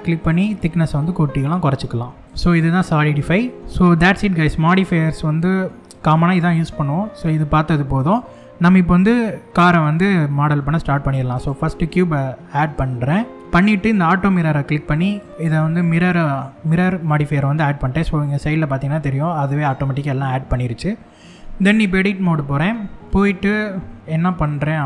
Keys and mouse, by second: 2.9 Tab, 4.5 click, 5.4 middle click, 6.1-6.5 middle drag, 7.1 x, 8.3 shift+a, 12.5-13.1 middle drag, 14.7 click, 21.4 Tab, 22.8 click, 23.0 middle click, 23.8 KP_1, 23.9 click.